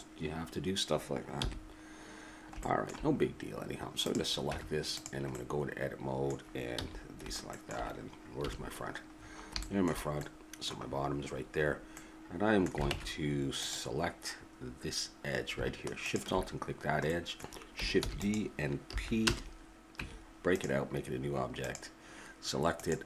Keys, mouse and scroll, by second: 1.4 n, 2.2-4.1 middle drag, 4.1 right click, 4.5 Tab, 5.3-6.7 drag, 6.7 middle click, 6.7 a, 8.4 KP_1, 12.9 ctrl+Tab, 14.8-16.0 middle drag, 16.0 right click, 16.7-17.8 middle drag, 17.8 right click, 18.0 shift+d, 18.9 p, 20.0 Tab, 21.6-23.0 right drag.